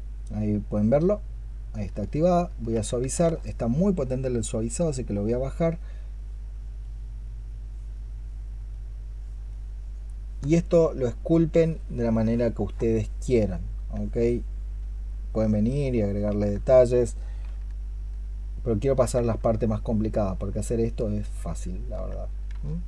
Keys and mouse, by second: 1.9 shift+click, 2.8 ctrl+z, 3.9 shift+click, 4.8 shift+click, 5.6 shift+click, 15.0 alt+click, 15.6 alt+click, 17.3-18.9 s, 19.6 alt+click, 20.6 alt+click, 22.4 shift+click.